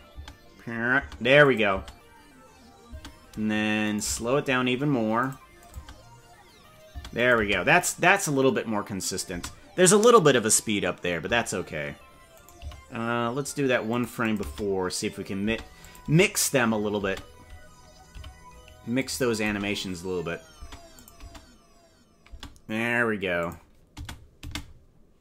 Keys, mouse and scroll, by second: 0.2 space, 1.0 space, 1.4 click, 1.8 space, 3.0 space, 4.0 right click, 4.0 g, 5.6-7.0 drag, 5.8 space, 7.0 space, 7.2 click, 7.4 space, 9.3 space, 12.5 right click, 12.7 g, 14.2-15.6 drag, 14.5-18.1 typing, 15.8 click, 19.3-21.1 drag, 19.5 space, 20.7 space, 21.3 space, 22.3 space, 23.4 click, 24.1 space, 24.5 space.